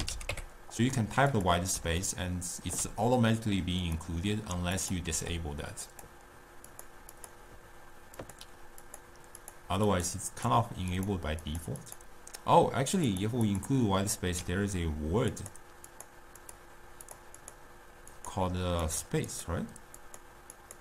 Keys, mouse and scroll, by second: 2.1-3.9 ctrl+middle drag, 3.9 click, 4.9 click, 5.2 u, 8.9 click, 9.5 click, 10.2 click, 10.5 click, 11.1 click, 11.6 click, 12.0 click, 13.2 click, 13.6 click, 15.4 click, 16.0 click, 16.5 click, 17.2 click, 17.5 click, 18.2 click, 18.9 click, 19.5 click, 20.1 click, 20.7 click.